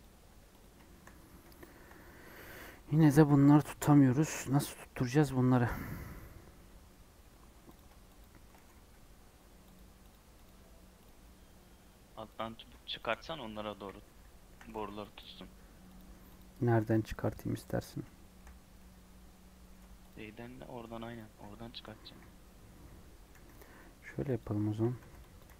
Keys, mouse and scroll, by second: 0.2 Tab, 0.5 click, 0.8 shift+middle click, 1.2 scroll up 1, 1.5-3.3 shift+middle drag, 3.3-4.2 scroll up 3, 4.2 scroll down 1, 4.3-7.7 middle drag, 7.7 click, 8.1 shift+click, 8.6 g, 10.0 click, 10.4 click, 11.0 click, 11.1-12.3 middle drag, 12.3 click, 12.9 shift+click, 13.6 KP_1, 14.1 Tab, 14.7 alt+z, 15.1 click, 15.3 g, 16.0 Tab, 16.3 click, 16.7 alt+z, 17.5 scroll down 1, 17.7 scroll up 1, 18.1 shift+middle click, 18.5 scroll down 2, 18.7-20.0 middle drag, 20.0 click, 20.1 Tab, 20.8 3, 21.1 click, 22.0 KP_1, 23.2 e, 24.6 1, 24.9 alt+z, 25.3 click, 25.4 g.